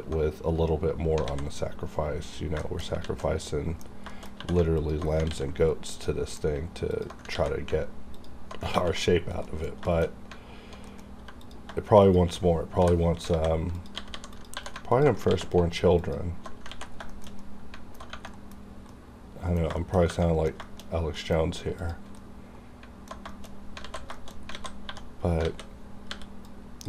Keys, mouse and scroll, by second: 1.3 alt+a, 2.4 scroll down 1, 2.6 shift+middle click, 3.0 alt+z, 3.2 alt+middle click, 3.5 scroll down 1, 4.1 shift+middle click, 4.4 2, 4.8 alt+click, 5.3 ctrl+x, 5.6 scroll down 1, 5.9 middle click, 6.9 alt+click, 6.9 alt+click, 7.3 ctrl+x, 8.1 alt+click, 8.7 ctrl+x, 9.2 scroll down 1, 9.5 middle click, 9.7 scroll up 1, 9.9 shift+middle click, 10.8-11.2 scroll up 1, 11.2 1, 11.4 click, 11.4 click, 12.0 shift+click, 12.7-14.5 typing, 13.7 click, 14.3 click, 14.9 alt+click, 15.3 ctrl+x, 16.0 alt+click, 16.7 ctrl+x, 16.8 ctrl+scroll down 2, 17.1 shift+middle click, 18.3 middle click, 18.3 middle click, 18.6 scroll up 1, 18.9 middle click, 20.2 middle click, 20.6 shift+middle click, 20.9 scroll up 1, 21.2 middle click, 21.7 alt+click, 21.8 alt+click, 22.2 middle click, 23.5 scroll up 1, 23.8 alt+z, 24.2 shift+middle click, 24.3 scroll up 2, 24.5 alt+a, 24.8 1, 25.4 alt+a, 26.1 b, 26.5 click.